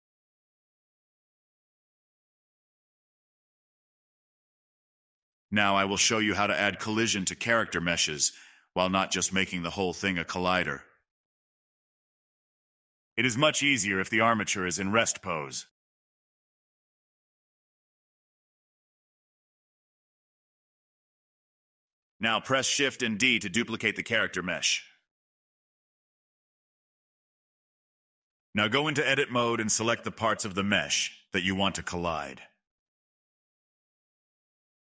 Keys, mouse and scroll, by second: 0.3 right drag, 0.4-0.8 middle drag, 1.5 click, 2.2-2.9 scroll down 3, 2.9 shift+middle click, 3.7-4.4 scroll up 1, 4.4 click, 6.0 click, 6.7-10.3 drag, 10.4 click, 11.5 Delete, 12.0-13.6 middle drag, 13.6 click, 14.6 click, 15.3 click, 16.6 click, 19.1 click, 19.3 click, 19.7-21.0 middle drag, 21.0 scroll up 2, 21.1 middle click, 21.6 click, 22.0-23.3 shift+middle drag, 23.3 scroll down 1, 23.5-24.7 middle drag, 24.7 shift+d, 27.2 click, 28.1 g, 28.5-30.9 drag, 30.9-31.4 scroll down 2, 31.4 middle click, 32.3-32.9 scroll down 1, 32.9-33.2 scroll down 1, 32.9 click, 33.2-33.7 scroll up 1, 33.7-34.8 shift+drag.